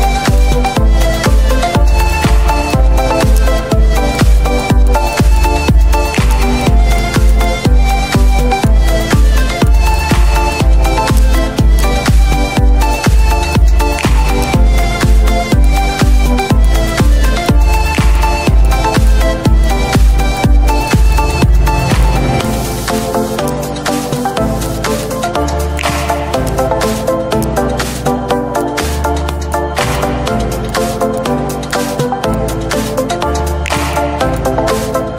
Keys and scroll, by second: 0.1 ctrl+z, 1.1 space, 2.6 ctrl+z, 4.6 ctrl+z, 11.9 z, 28.5 z, 29.8 z, 33.1 z.